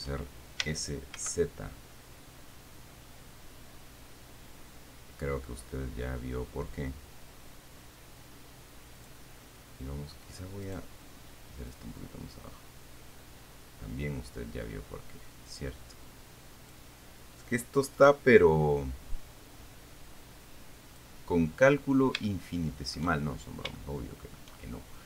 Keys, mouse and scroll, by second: 1.0 s, 1.4 z, 9.2 click, 12.1-17.2 drag, 18.2 middle click, 18.5 right click, 19.0-21.4 drag, 22.0-22.5 scroll down 1, 22.5 shift+middle click, 23.5-24.0 shift+scroll up 1, 24.0 shift+middle click.